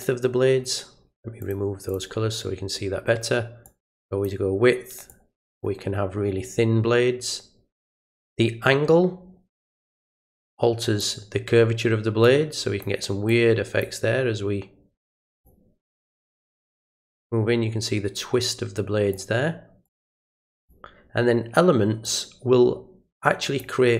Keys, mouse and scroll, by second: 1.4 click, 1.9 click, 3.6 click, 5.1 click, 10.4-11.0 drag, 12.2 click, 13.3 click, 15.0 click, 16.3-19.1 drag, 19.8 click, 22.0-23.6 drag.